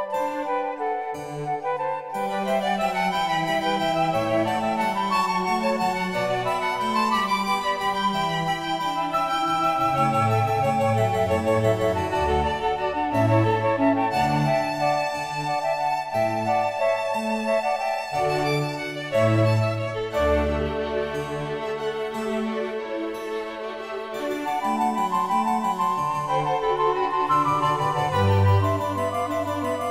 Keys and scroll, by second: 4.4 l, 5.6 typing.